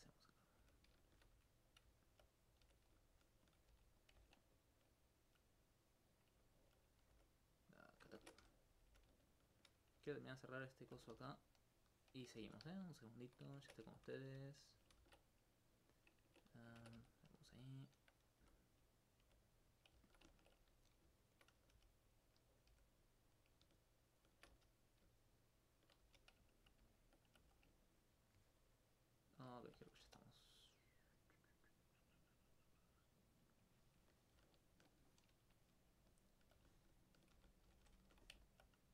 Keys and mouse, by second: 0.4 click, 0.6 g, 1.0 shift+click, 2.0 alt+click, 2.4 right click, 2.6 g, 3.5 shift+click, 4.4 alt+click, 5.0 alt+click, 5.6 right click, 7.2 alt+click, 7.5 click, 7.9 right click, 8.2 ctrl+Tab, 8.4 ctrl+F1, 8.7 right click, 8.9 right click, 9.5 shift+click, 9.9 right click, 10.2 alt+click, 11.4 click, 11.8 right click, 12.4 g, 13.6 ctrl+Tab, 13.8 ctrl+2, 14.1 right click, 15.0 ctrl+z, 16.8 ctrl+Tab, 17.0 ctrl+1, 17.2 right click, 19.0 right click, 19.2 right click, 19.8 click, 20.8 right click, 21.2 shift+right click, 22.4 right click, 22.7 g, 23.3 click, 23.8 shift+right click, 24.5 shift+f, 24.9 right click, 25.2 shift+right click, 25.8 shift+right click, 26.0 shift+f, 26.9 alt+click, 27.3 alt+click, 27.9 ctrl+click, 28.4 ctrl+click, 29.6 alt+click, 30.0 alt+click, 33.2 click, 36.1 alt+click, 36.5 alt+click, 38.5 alt+click.